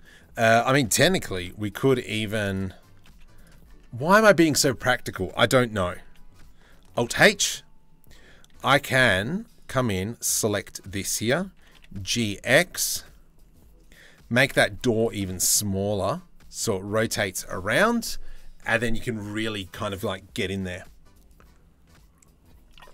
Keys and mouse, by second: 0.9 KP_3, 1.3 KP_1, 1.6 z, 2.6 z, 3.3 Tab, 3.7 1, 5.6 a, 6.5 alt+h, 8.1 c, 11.2 g, 14.3 z, 14.8 middle click, 15.6 Tab.